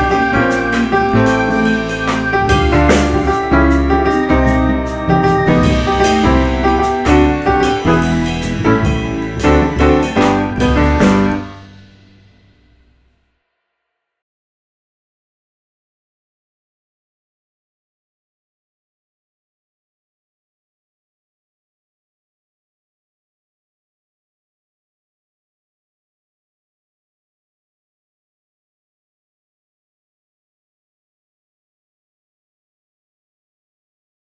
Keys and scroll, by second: 8.5 ctrl+z, 10.2 F3, 13.7 F3, 13.8 F4, 14.1 F3, 14.3 F4, 16.7 1, 16.8 Return, 18.5 F3, 18.9 F4, 21.0 F4, 24.8 2, 25.0 F4, 28.7 1, 29.3 Return, 29.8 F4.